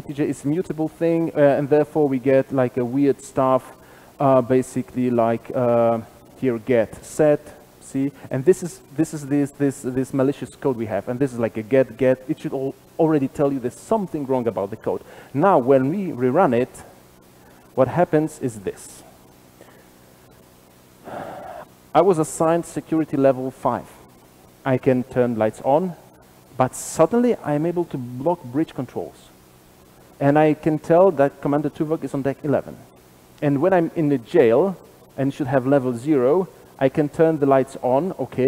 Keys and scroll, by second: 16.4 shift+F10.